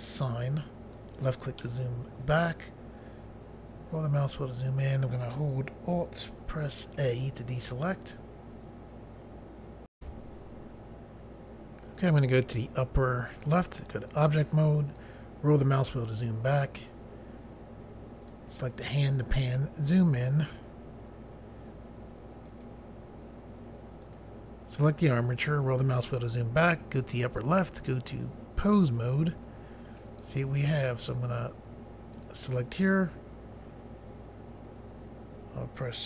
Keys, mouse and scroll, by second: 0.0 click, 0.9 scroll down 2, 1.6 middle click, 3.6 scroll up 1, 7.0 alt+a, 9.9 Pause, 13.3 click, 14.1 click, 15.0 scroll down 2, 18.3 click, 19.4 scroll up 1, 20.3 scroll up 1, 22.4 click, 24.0 click, 25.4 scroll down 1, 27.4 click, 28.6 click, 30.2 click, 32.1 click.